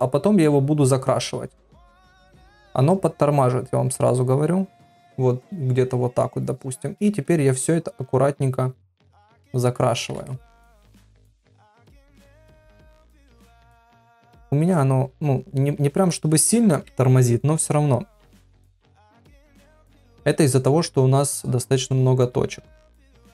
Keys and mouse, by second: 7.6-8.9 drag, 9.4 ctrl+middle click, 10.3 shift+middle click, 10.8 ctrl+middle click, 11.8-14.2 drag, 14.7-16.1 drag, 16.7 ], 17.3-21.2 drag, 21.9-23.2 drag, 22.8 shift+middle click.